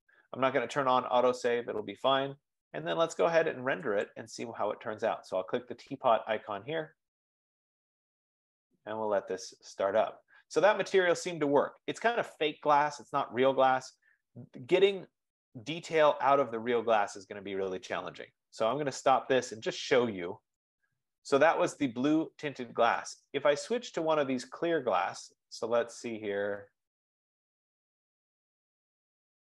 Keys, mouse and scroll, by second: 2.7 click, 4.2-6.0 drag, 6.3-9.3 drag, 19.2 click, 21.1 click, 23.4-24.1 scroll up 4, 26.2-26.7 scroll down 1, 26.7-27.7 scroll down 1, 27.7-28.1 scroll up 2, 28.1-28.6 scroll, 29.4-29.5 scroll.